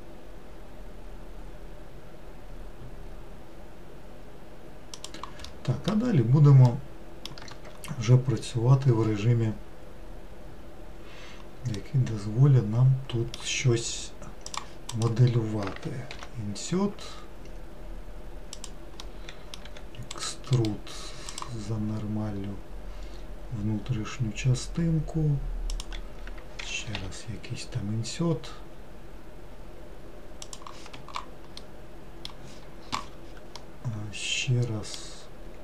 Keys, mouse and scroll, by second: 5.6 middle click, 6.2 scroll down 2, 6.8 middle click, 7.5 Tab, 11.9-14.6 middle drag, 14.6 click, 19.1 middle click, 19.8 e, 21.5-23.8 right drag, 33.7-35.6 middle drag.